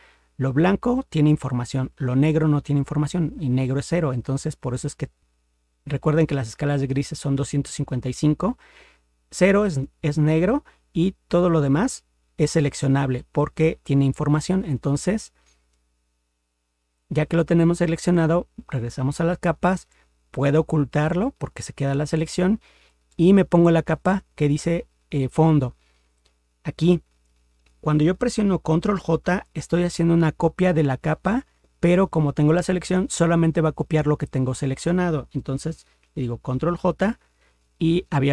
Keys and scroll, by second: 36.7 ctrl+j.